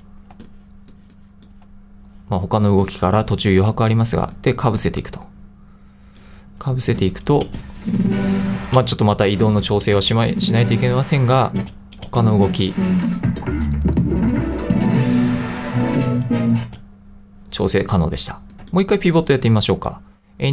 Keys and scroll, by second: 0.4 2, 7.5 space, 8.8 space, 9.9 space, 11.6 space, 16.7 space.